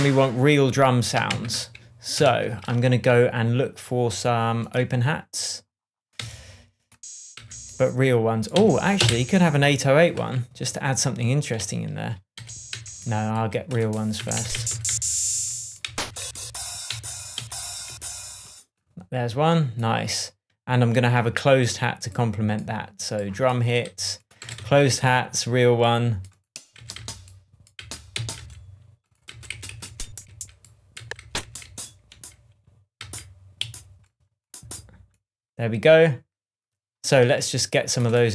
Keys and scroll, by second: 1.3 super+d, 2.1 shift+super+d, 2.2 shift+super+Tab, 6.1 Right, 7.3 Down, 8.5 Up, 8.9 Down, 12.3 Up, 12.7 Down, 14.1 Down, 17.3 Up, 17.8 Down, 24.4 Left, 26.7 Down, 33.6 Up, 34.5 Down.